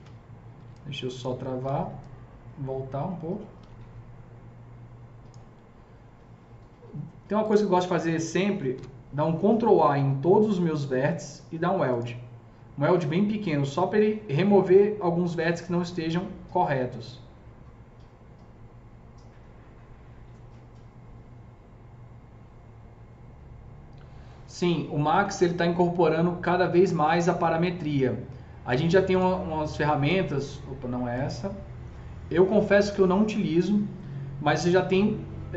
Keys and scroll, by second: 0.6 s, 8.7 ctrl+a.